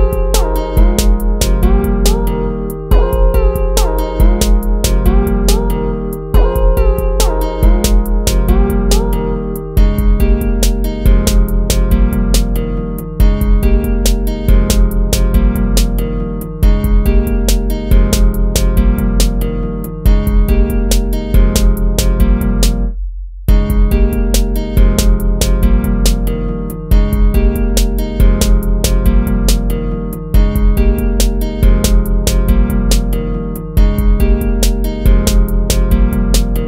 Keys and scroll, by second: 2.0 ctrl+-, 2.0 ctrl++, 2.3 ctrl+-, 2.5 ctrl+-, 2.6 ctrl++, 2.8 ctrl++, 4.6 ctrl+-, 4.8 ctrl+-, 11.8 ctrl++, 12.1 ctrl+-, 12.1 ctrl+z, 12.8 ctrl++, 13.1 ctrl++, 13.2 ctrl+-, 13.3 ctrl+-, 13.6 ctrl+-, 13.7 ctrl++, 13.8 ctrl+-, 14.0 ctrl++, 14.2 ctrl++, 14.3 ctrl+z, 14.8 ctrl+-, 15.5 ctrl+z, 15.8 ctrl+-, 16.0 ctrl++, 16.3 ctrl++, 16.8 ctrl+c, 20.1 ctrl+-, 20.8 ctrl++, 22.6 ctrl++, 23.3 ctrl+-, 26.8 ctrl+-, 27.0 ctrl++, 29.5 ctrl++, 29.7 ctrl+-, 31.4 ctrl+-, 31.8 ctrl++, 35.7 ctrl+-, 36.4 ctrl+-, 36.5 ctrl++.